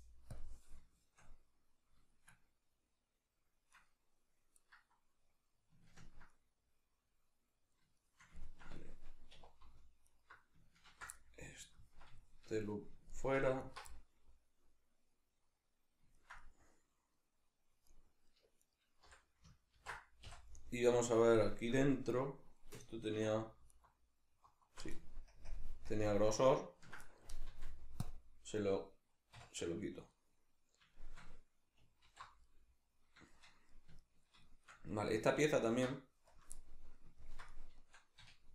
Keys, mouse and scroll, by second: 0.4 click, 0.8-3.8 shift+middle drag, 3.8 right click, 4.6-10.1 middle drag, 9.3 2, 10.1 alt+right click, 10.8 ctrl+x, 11.2-13.6 middle drag, 13.6 alt+right click, 13.9-18.6 middle drag, 18.6 right click, 19.0 l, 20.6-23.7 middle drag, 23.2 3, 23.7 alt+right click, 25.3 ctrl+KP_Add, 27.5 x, 29.4 \, 30.1-35.5 middle drag, 32.0 alt+h, 35.5 alt+right click, 36.3 KP_Decimal, 36.6-38.5 middle drag, 38.2 2.